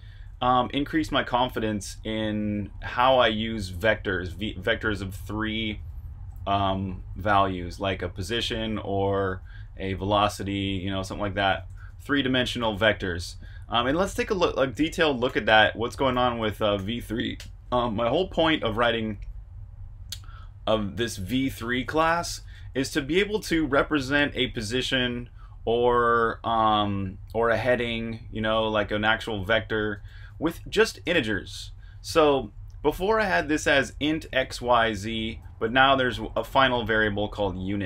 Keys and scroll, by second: 0.0-8.1 typing, 11.1-11.8 typing, 15.0-17.3 typing, 18.4-19.2 typing, 21.3-24.1 typing, 29.2-31.1 typing, 33.4-37.8 typing.